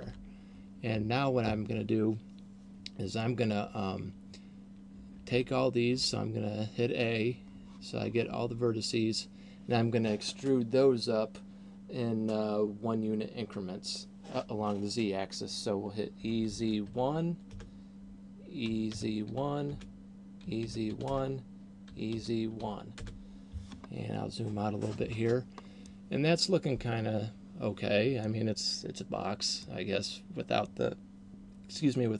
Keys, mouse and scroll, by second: 0.1 Tab, 5.3 a, 6.1 a, 16.1 e, 18.6 e, 20.6 e, 21.8 e, 23.8-25.8 scroll down 3, 25.8 middle click, 29.6 middle click.